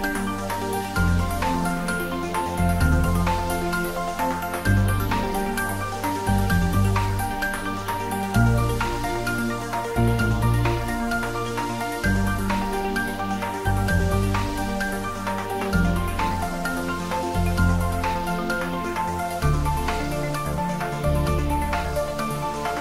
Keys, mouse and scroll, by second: 4.9 click, 5.3 s, 5.6 x, 6.3 y, 8.0 click, 8.5 s, 11.0 s, 11.5 s, 11.9 y, 13.2 click, 15.3-17.1 typing.